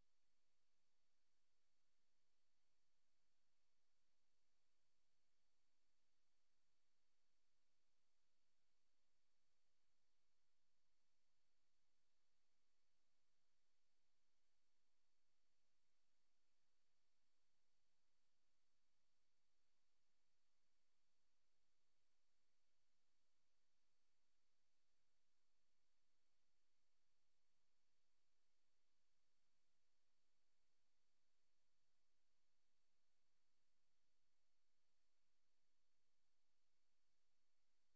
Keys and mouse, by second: 1.6 ctrl+z, 2.2 ctrl+z, 3.5 click, 4.4 click, 7.4 Return, 8.2 click, 10.5 Return, 11.5 click, 13.1 Return, 14.0 click, 17.3 click, 18.3 click, 21.9 click, 25.7 click, 27.4 Escape, 28.3 click, 30.7 click, 32.5 Return, 33.2 click, 34.2 Return, 34.2 click, 34.8 click.